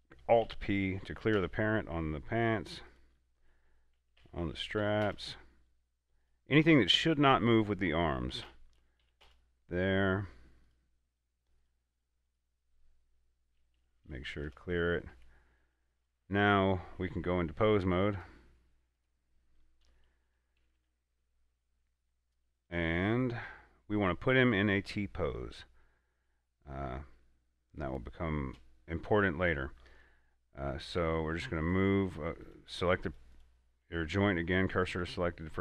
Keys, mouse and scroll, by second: 0.7 alt+p, 1.4 Down, 1.6 Return, 3.2 right click, 4.5 alt+p, 5.1 Down, 5.3 Return, 6.5 right click, 7.1 right click, 8.7 alt+p, 9.3 Down, 9.5 Return, 10.9 right click, 11.4 right click, 12.3 right click, 14.0 alt+p, 14.6 Down, 14.7 Return, 15.4 a, 16.3 right click, 18.4 click, 22.8 right click, 24.8 scroll down 1, 25.0 scroll up 1, 25.9 shift+middle click, 26.2-26.6 scroll up 2, 27.1 shift+middle click, 27.5 scroll down 1, 31.2 r, 31.9 right click, 32.7 click, 33.6 right click, 34.3 shift+s, 35.2 click.